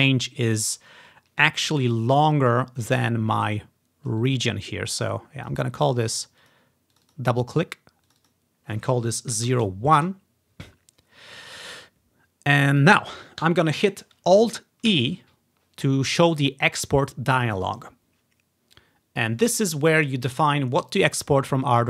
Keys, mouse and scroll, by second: 0.9-1.3 scroll up 2, 1.3 scroll down 2, 1.9-2.9 ctrl+drag, 3.9-4.6 scroll up 1, 4.3 click, 5.2 click, 6.0 click, 6.3 click, 6.5 click, 7.1 click, 7.2 click, 8.2 click, 8.3 click, 9.5 typing, 10.1 Return, 11.8-12.4 ctrl+scroll down 2, 12.4-13.0 ctrl+scroll down 1, 15.0 alt+e, 15.3 typing.